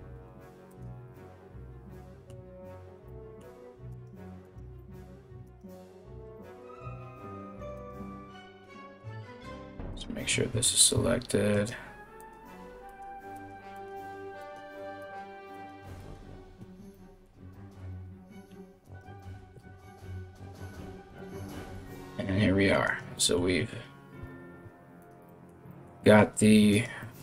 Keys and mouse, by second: 3.5 right click, 4.0 right click, 5.0 right click, 7.3-11.2 ctrl+drag, 11.8-13.0 ctrl+drag, 14.1-15.7 ctrl+drag, 18.4 alt+right click, 19.1 g, 22.4 right click, 23.8 g, 26.3 right click, 27.0 right click.